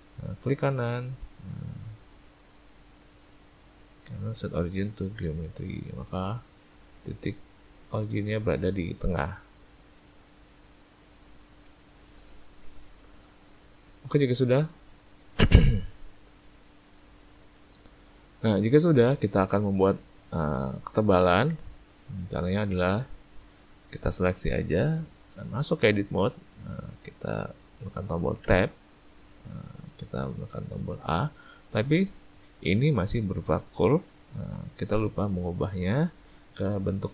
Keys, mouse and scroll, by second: 0.5 right click, 3.2 right click, 6.1 middle click, 10.5 click, 13.2 middle click, 14.0 middle click, 18.1 middle click, 19.0 middle click, 19.6 ctrl+middle click, 20.1 ctrl+middle click, 20.6 shift+middle click, 21.2 ctrl+middle click, 21.9 middle click, 23.0 ctrl+middle click, 28.5 Tab, 31.0 a.